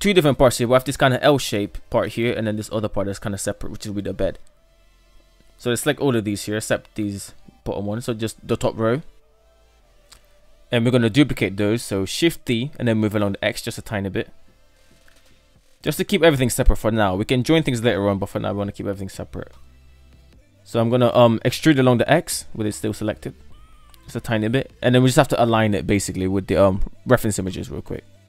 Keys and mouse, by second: 3.3 right click, 4.6 ctrl+right click, 5.1 middle click, 6.0 middle click, 6.6 shift+right click, 6.9-7.4 shift+right drag, 8.2 Tab, 8.4 KP_7, 9.2 Tab, 9.7 shift+middle drag, 10.5-10.9 shift+middle drag, 11.5 shift+d, 20.7 e.